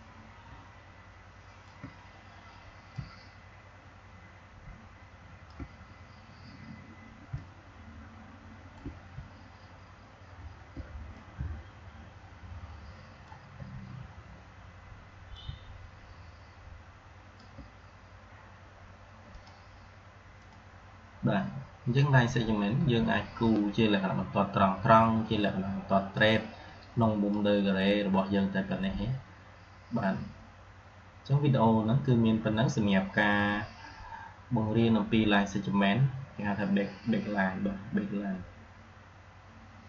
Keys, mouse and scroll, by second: 7.2-8.8 shift+drag, 11.0-15.2 drag, 15.5-17.4 shift+drag, 26.4-27.3 drag, 39.8 click.